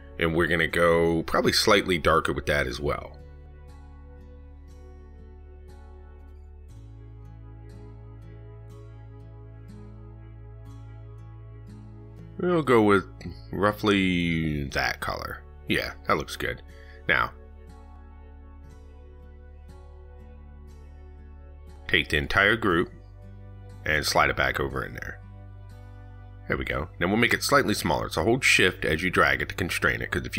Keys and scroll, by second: 28.5 ctrl+z.